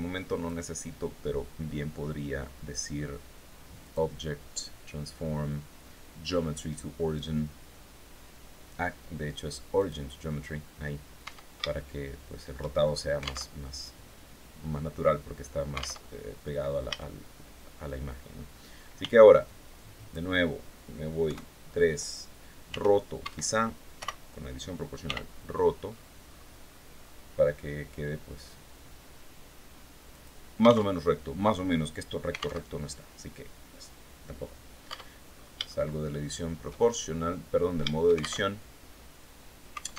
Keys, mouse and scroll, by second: 3.3 click, 9.2 click, 10.7 Tab, 11.2 shift+scroll up 2, 12.2-12.6 shift+scroll up 3, 12.9 alt+Tab, 15.5 alt+Tab, 16.3 a, 18.4 b, 18.9 click, 20.7 KP_3, 22.1 r, 22.7 Escape, 23.4 o, 24.5 r, 25.3-26.7 scroll down 8, 29.6 click, 30.3 alt+Tab, 32.1 alt+Tab, 34.3 Tab, 34.8-35.1 scroll down 3, 35.1-36.3 shift+drag, 36.5 shift+scroll down 3, 37.8 alt+shift+Tab, 39.6 alt+Tab.